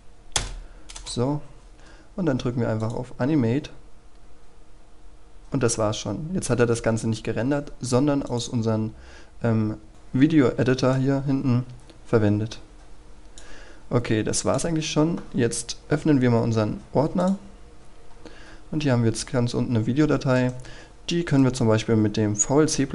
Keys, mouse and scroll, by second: 0.4 Return, 2.8-14.1 drag, 18.1-19.8 scroll down 1, 20.4 right click, 20.8 click, 21.3 right click.